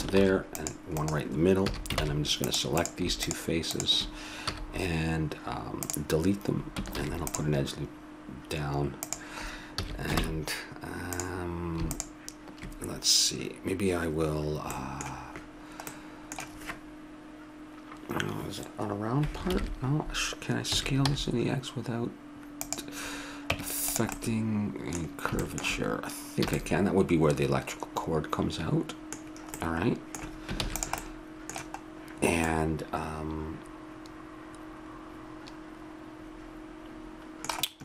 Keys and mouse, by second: 0.1 ctrl+r, 1.6 a, 2.0 ctrl+Tab, 2.8 right click, 3.2-5.7 drag, 4.5 x, 6.9 ctrl+r, 9.8 a, 10.2 ctrl+Tab, 11.9-13.7 drag, 14.7 middle click, 19.5 ctrl+KP_1, 20.7 s, 23.5 Tab, 26.5 a, 30.6 ctrl+s, 37.7-37.8 middle drag.